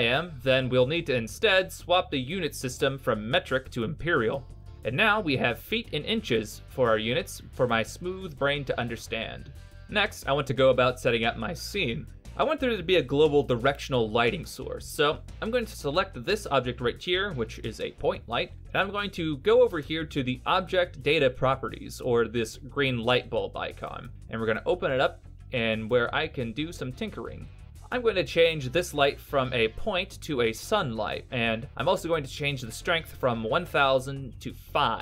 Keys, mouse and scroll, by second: 0.0 click, 3.3 middle click, 4.1 g, 8.7 middle click, 11.2 n, 11.9 middle click, 12.8 middle click, 15.1 right click, 23.3 click, 27.6 click, 30.4 click.